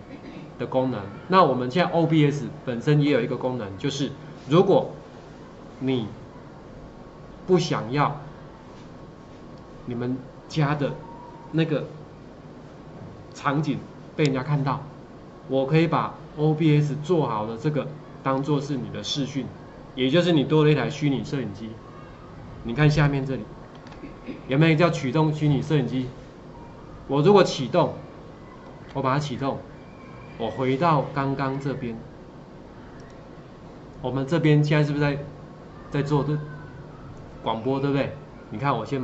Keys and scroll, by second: 23.8 ctrl+4, 24.0 ctrl+4, 28.7 ctrl+4.